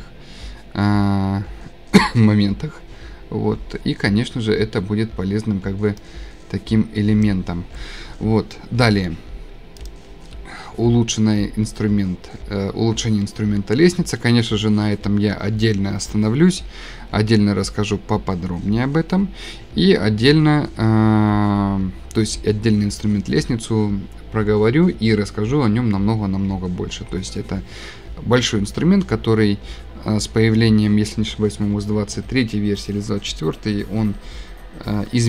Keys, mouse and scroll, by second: 7.2 click, 9.9 click, 10.4 scroll, 12.7 scroll, 13.7 scroll.